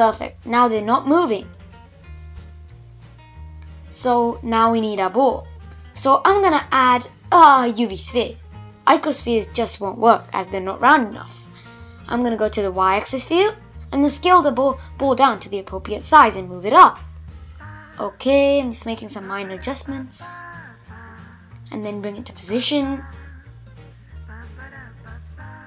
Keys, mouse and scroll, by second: 3.9 shift+a, 7.8-10.1 middle drag, 10.1 click, 11.4 s, 13.4 g, 15.3 s, 16.4-18.0 middle drag, 18.0-18.4 scroll down 2, 18.4-19.5 middle drag, 19.5 g, 21.7 g, 22.8-25.6 middle drag.